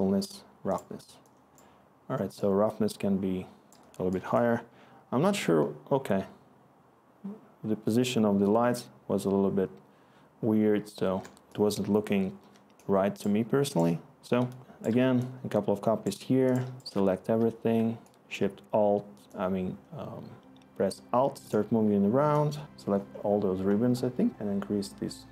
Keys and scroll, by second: 4.4 ctrl+i, 4.9 ctrl+i, 5.4 ctrl+i, 11.0 ctrl+i, 11.0 ctrl+i, 11.1 ctrl+i, 11.2 ctrl+i, 11.4 ctrl+i, 11.8 ctrl+i, 12.4 ctrl+i, 12.7 ctrl+i, 13.1 ctrl+i, 13.6 ctrl+i, 13.9 ctrl+i, 14.3 ctrl+i, 14.7 ctrl+i, 15.0 ctrl+i, 15.6 ctrl+i, 15.6-16.3 typing, 21.2-21.9 typing.